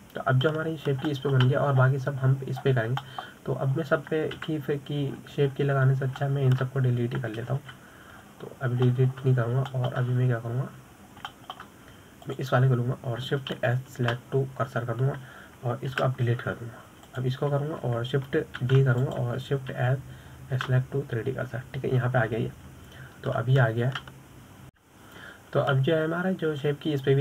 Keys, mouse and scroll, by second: 1.8-3.1 middle drag, 3.1-3.5 scroll up 1, 3.5-4.2 shift+middle drag, 4.2-5.0 scroll down 4, 5.0-5.4 scroll down 6, 5.4-6.8 middle drag, 6.8 KP_7, 7.5-8.3 scroll up 9, 8.3-8.6 scroll down 3, 8.6-10.0 middle drag, 10.0 KP_7, 10.7-11.3 scroll up 1, 11.3 shift+middle click, 11.7-12.1 scroll up 3, 12.1-13.4 shift+middle drag, 13.4 scroll down 1, 13.7-14.6 shift+middle drag, 14.6 click, 15.9 shift+s, 18.4 Delete, 19.4 drag, 21.1 shift+d, 22.1 shift+s.